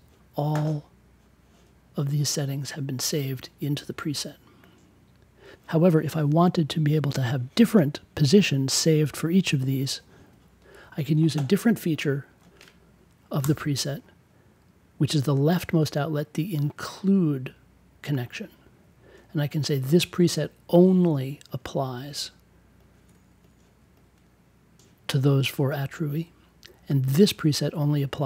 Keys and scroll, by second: 13.3 BackSpace.